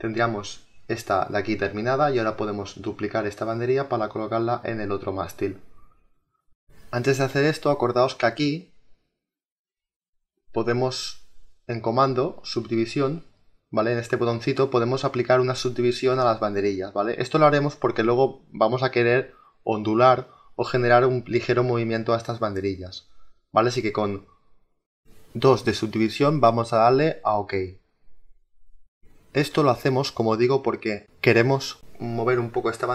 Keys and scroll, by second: 16.6 1, 20.9 ctrl+z, 26.8 2.